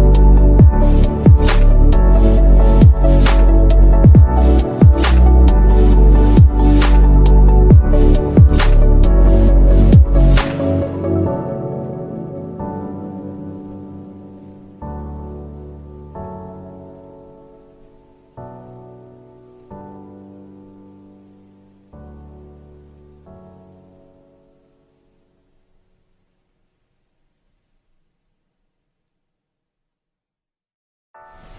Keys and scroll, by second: 11.5 shift+Page_Up, 11.7 ctrl+Page_Down, 13.5 ctrl+Page_Up, 27.5 shift+Page_Down.